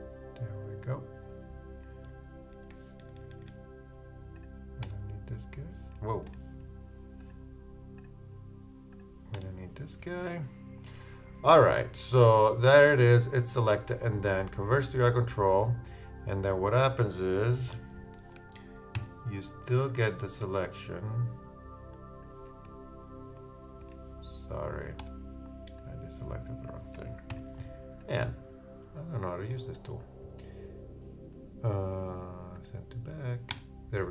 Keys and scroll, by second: 2.5 shift+Down, 6.3 super+z, 18.9 shift+super+d, 19.4 super+d, 23.8 super+z, 27.3 super+d.